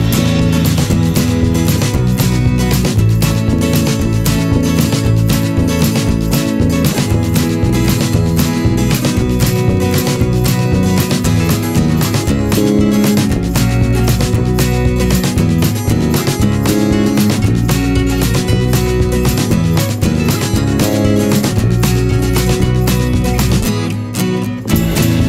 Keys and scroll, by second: 2.8 v, 4.0 p, 5.8 ctrl+z, 9.2 v, 13.5 m.